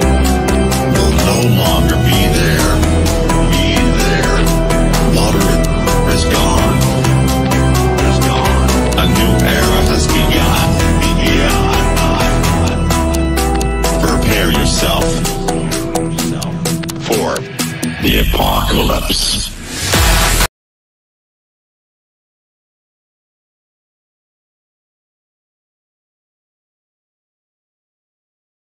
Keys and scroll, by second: 7.5 F9.